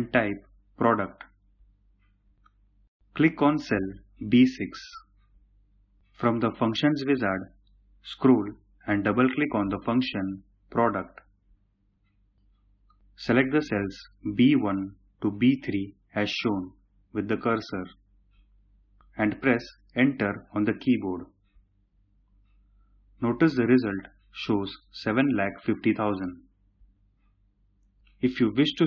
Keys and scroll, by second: 19.5 Return.